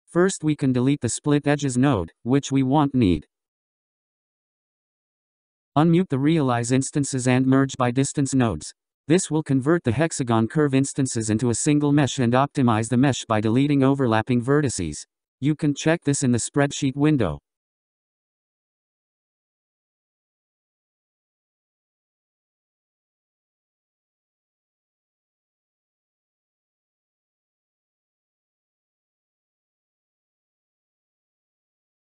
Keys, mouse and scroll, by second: 2.4-3.0 scroll up 10, 3.6 click, 5.3 ctrl+x, 6.5 click, 7.5 click, 8.9 m, 9.4 click, 9.8 m, 13.0-19.6 drag, 20.3 click, 21.3 m, 21.8 click, 22.1 m, 27.3 click, 27.6 m.